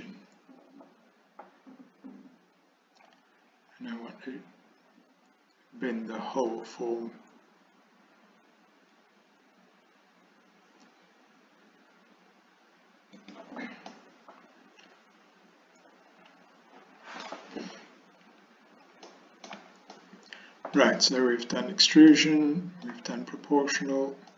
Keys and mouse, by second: 13.9-17.3 middle drag, 19.1 shift+middle click, 20.0 middle click, 22.2 middle click.